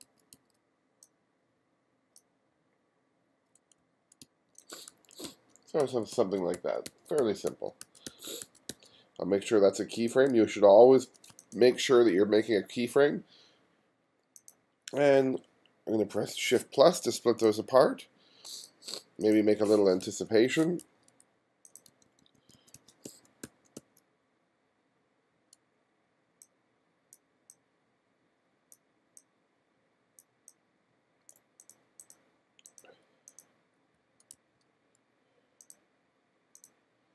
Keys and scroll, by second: 3.8-9.2 typing, 16.3 shift+=, 20.0 f, 20.8 g, 21.9 b, 34.0 f, 34.4 g.